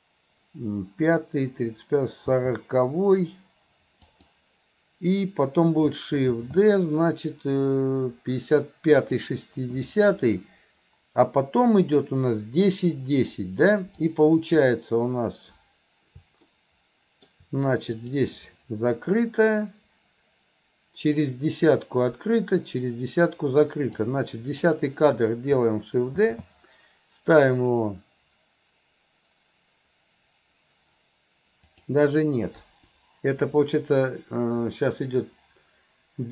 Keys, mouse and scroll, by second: 2.4 g, 14.0 click, 16.5 middle click, 18.1 click, 24.0-24.6 drag, 32.7 Delete.